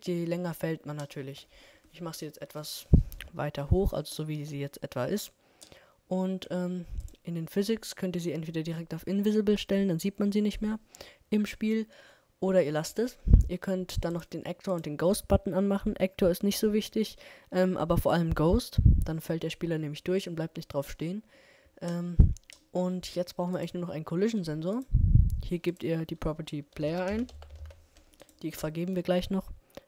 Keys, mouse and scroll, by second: 0.4-8.1 middle drag, 17.5 middle click, 21.3 middle click.